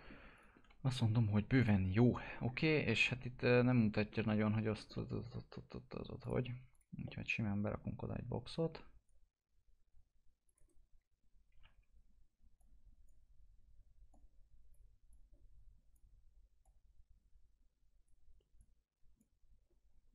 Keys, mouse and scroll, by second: 0.3 click, 0.6 alt+x, 1.5 click, 2.4-3.0 scroll up 1, 3.5 scroll down 1, 4.9 middle click, 5.3 scroll up 1, 6.2 click, 7.0 middle click, 7.6 click, 10.5 right click, 12.5-20.1 drag.